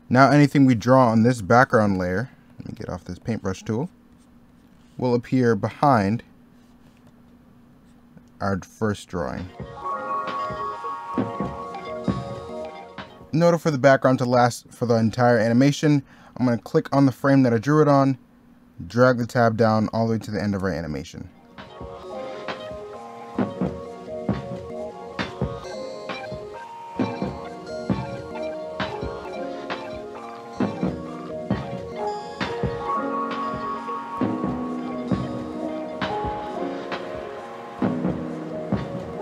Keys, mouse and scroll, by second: 2.2 ctrl+z, 2.7 e, 3.1 b, 5.6 ctrl+z, 10.7 middle click, 11.5 middle click, 12.5 middle click, 12.7 middle click, 12.8 scroll down 1, 12.9 middle click, 22.5 right click, 22.8 e, 22.9 b, 23.1 i, 24.2 i, 24.6 right click, 25.4 middle click, 25.8 right click, 26.3 u, 26.5 ctrl+z, 26.6 u, 27.4 scroll down 1, 27.7 i, 28.3 u, 30.1 middle click, 30.7 middle click, 31.7 middle click, 32.1 middle click, 32.6 e, 33.3 ctrl+z, 35.2 u, 36.2 middle click, 36.5 middle click, 37.1 e, 38.5 middle click, 39.0 ctrl+z.